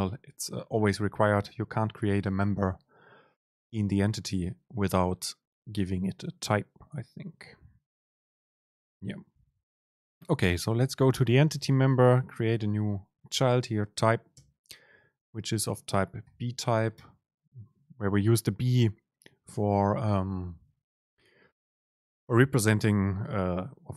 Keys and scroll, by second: 11.6 Return, 14.5 super+space.